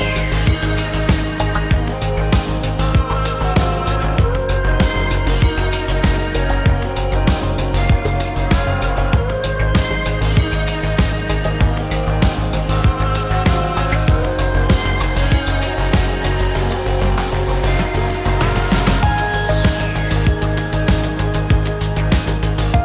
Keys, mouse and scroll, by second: 12.1 click, 15.6 ctrl+z.